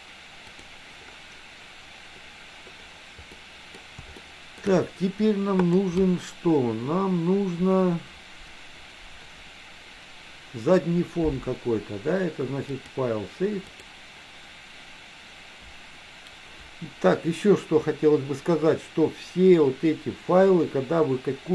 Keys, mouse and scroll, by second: 0.6 click, 3.4 middle click, 4.3 shift+middle click, 5.7 click, 12.8-14.1 drag.